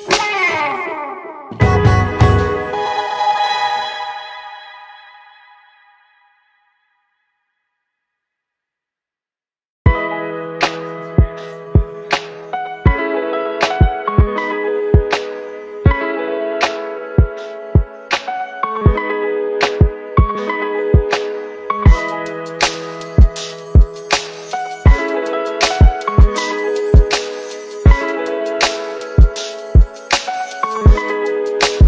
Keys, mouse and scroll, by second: 2.7 shift+Down, 7.2-9.0 click, 9.4 space, 14.4 click, 15.9 shift+click, 17.6 ctrl+shift+c, 18.3-19.7 typing, 21.1-22.0 typing, 23.5 5, 23.6 Return, 27.9 click, 28.9-30.1 scroll up 1, 30.3 click.